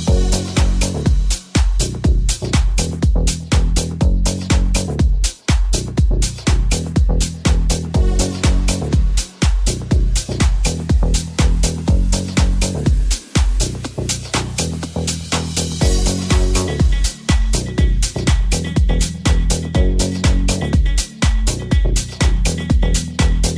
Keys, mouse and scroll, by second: 2.5-7.9 middle drag, 7.9 right click, 7.9-23.5 middle drag, 9.3 shift+a, 16.3 g, 16.3 KP_1, 20.2 s, 20.7 Tab, 21.5 e.